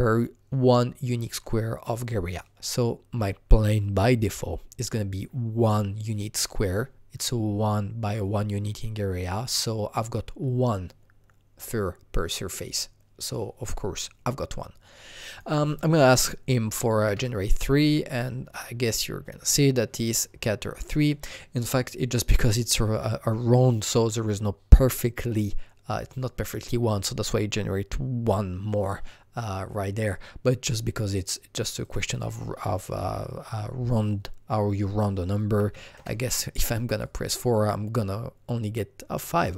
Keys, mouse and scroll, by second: 15.1 click, 15.3 double click, 16.7 KP_3, 17.0 KP_Enter, 18.8 click, 20.9 click, 30.0 click, 31.7 click, 31.8 double click, 35.6 double click, 35.6 KP_4, 35.9 Return, 37.0 click.